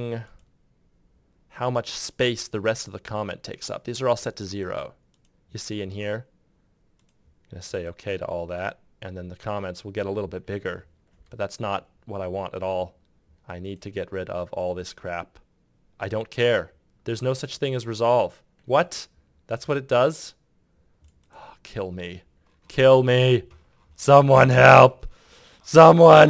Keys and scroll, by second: 26.2 typing.